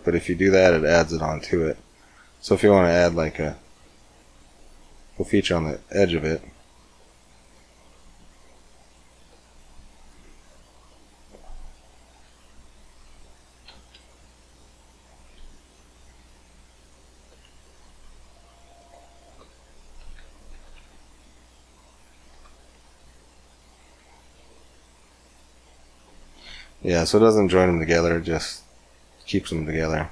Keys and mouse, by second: 3.1-4.9 drag, 4.9 middle click, 5.8 Tab, 6.6 click, 7.5 g, 9.2 Tab, 10.2 Tab, 11.7 a, 12.0 a, 12.8 a, 14.4 p, 17.2 Tab, 17.9 g, 19.2 Tab, 19.8 a, 20.0 a, 20.4 a, 21.4 p, 22.6 Tab, 23.5 click, 23.9 g, 25.9 click, 27.4 click, 28.2 click, 29.8-30.1 drag.